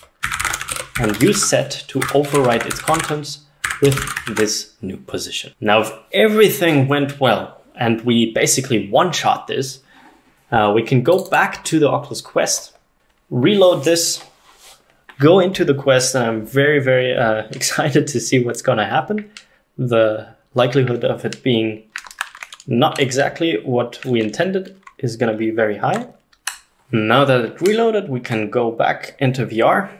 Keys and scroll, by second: 0.0-4.6 typing, 3.7 Tab.